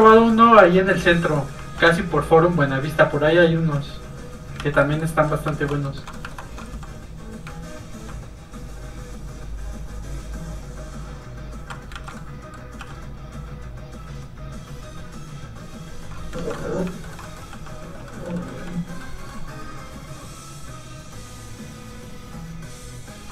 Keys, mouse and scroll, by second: 0.1 middle click, 0.2 middle click, 0.8 alt+shift+middle click, 1.8 alt+shift+f, 2.0 click, 4.6 ctrl+z, 4.8 middle click, 4.9 middle click, 5.0 scroll up 1, 5.3 middle click, 5.5 alt+shift+middle click, 6.8 alt+shift+f, 6.9 click, 7.1-7.5 scroll down 1, 9.3 shift+click, 10.0 click, 12.0 ctrl+z, 12.2 middle click, 12.8 ctrl+f, 12.9 click, 16.4 ctrl+z, 16.6 middle click, 16.7 middle click, 17.1 shift+middle click, 17.3 middle click, 17.5 f, 17.7 click, 18.1 middle click, 18.4 shift+middle click, 18.7 middle click, 18.8 click, 19.0 middle click, 20.0 click.